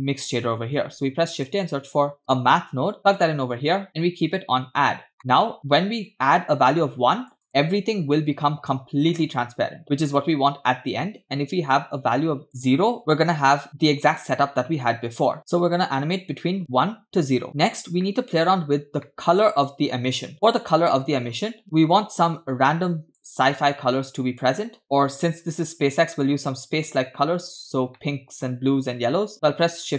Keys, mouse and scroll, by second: 0.7 shift+a, 4.7-5.6 scroll up 4, 5.2 middle click, 5.8-8.3 drag, 11.7-13.0 drag, 13.7 middle click, 13.7-14.2 scroll down 3, 17.5 drag, 17.7-18.0 scroll down 2, 18.1 middle click, 18.7-19.0 scroll up 3, 19.0 middle click, 19.7-20.0 drag, 20.3-21.4 drag, 21.6-22.1 drag, 21.6-22.1 scroll down 3, 22.3 click, 23.7 click, 24.8 click, 26.3-27.6 drag, 28.0 middle click, 29.3 shift+a.